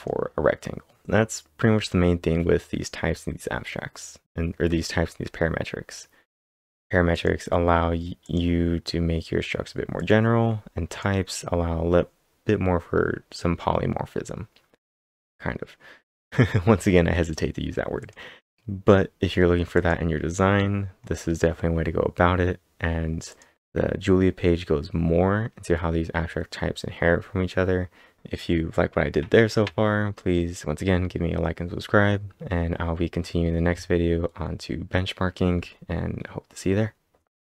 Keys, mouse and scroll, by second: 1.0 click, 1.8-2.8 scroll up 5, 4.6 scroll up 4, 6.9-7.6 typing, 7.1 click, 7.1 scroll up 1, 8.2 click, 10.0 click, 10.9 click, 14.8 click, 14.8-16.0 scroll down 3, 16.0 scroll down 2, 18.0 click, 18.5 click, 19.8 click, 20.5 scroll up 4, 23.3 click, 23.3 scroll up 1.